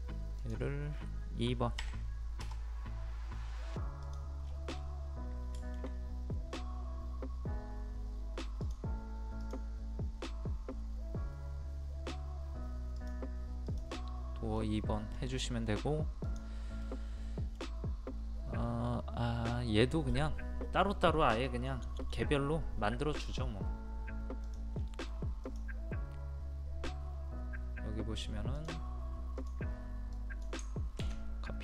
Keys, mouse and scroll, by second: 0.4 click, 1.8 KP_2, 4.0 click, 4.4 scroll down 1, 5.3 scroll up 1, 8.6 click, 14.5 middle click, 15.1 scroll down 1, 16.2 click, 16.7 scroll up 1, 16.8-18.5 middle drag, 24.4 click.